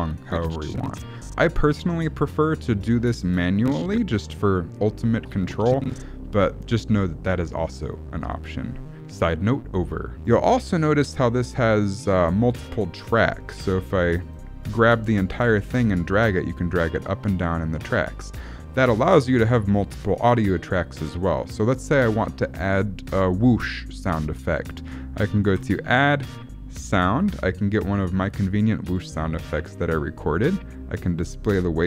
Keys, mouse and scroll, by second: 10.1 click, 10.9 click, 13.5 g, 14.6 click, 15.4 click, 25.5 click, 31.0 click.